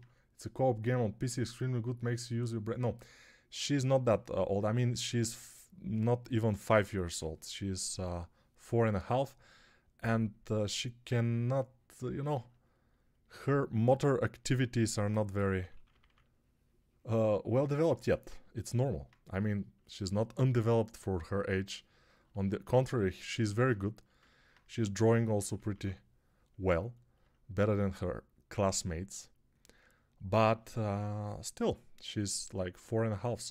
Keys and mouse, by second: 6.6 1, 7.1-7.9 [, 15.4 ], 15.6 ], 15.7 ], 15.9 ], 24.8-25.7 typing.